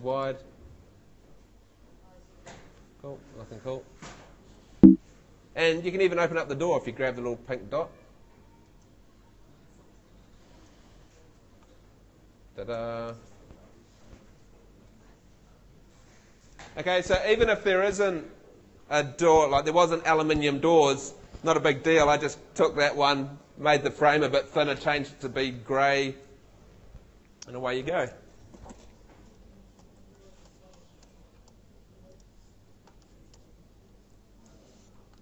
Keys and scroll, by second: 4.4 Escape, 12.3 Home, 29.7 Home, 33.3 w, 34.2 d.